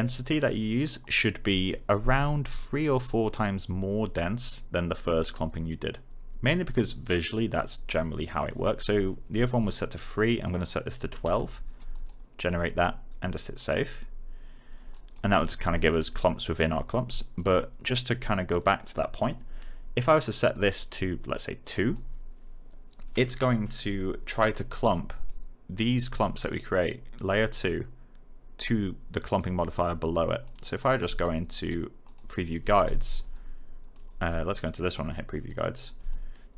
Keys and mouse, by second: 0.1 click, 10.0 click, 10.8-11.7 typing, 11.9 click, 15.3 alt+right click, 15.7 alt+middle click, 16.0 alt+right click, 17.5 alt+click, 24.8 click, 29.2 click, 33.9 click.